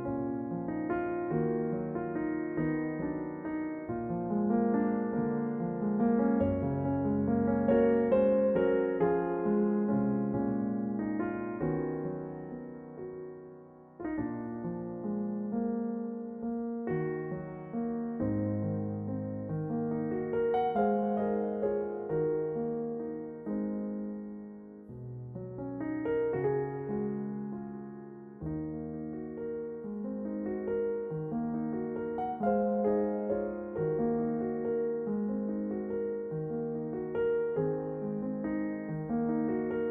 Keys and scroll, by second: 15.1 a, 22.1 a, 23.0 l, 27.5 a, 30.0 s, 30.8 g, 33.3 a, 39.8 ctrl+r.